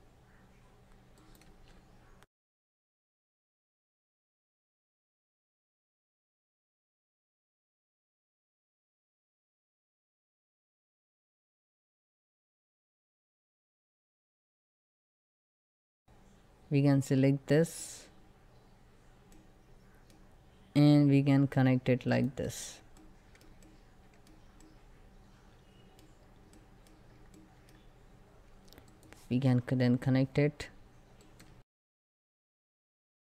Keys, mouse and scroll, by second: 12.9-14.1 middle drag, 14.1 scroll down 1, 14.3 shift+middle click, 14.5-15.0 scroll up 2, 14.8 middle click, 15.3 scroll down 1, 15.8 click, 23.4-25.6 shift+middle drag, 25.6 scroll up 1, 26.2 middle click, 26.5 scroll up 1, 27.0 shift+middle click, 27.3 scroll up 1.